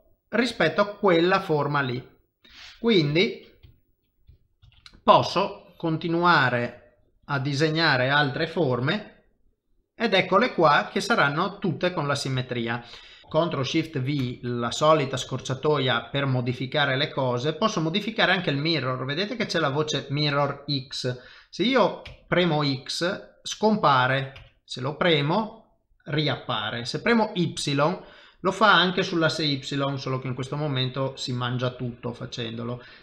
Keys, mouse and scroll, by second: 0.3 middle click, 3.1 KP_7, 3.7 shift+middle click, 4.6 shift+v, 5.2 click, 8.9 shift+v, 9.4 middle click, 10.7 shift+middle click, 11.2 middle click, 12.4 shift+middle click, 13.2 middle click, 14.2 ctrl+shift+v.